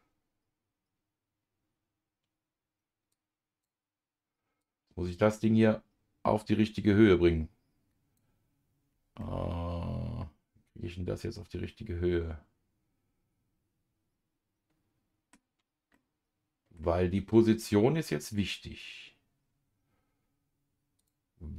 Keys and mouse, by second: 3.1 click, 4.6-8.2 drag, 9.2-15.3 middle drag, 15.9 middle click, 18.3 click, 21.0 click.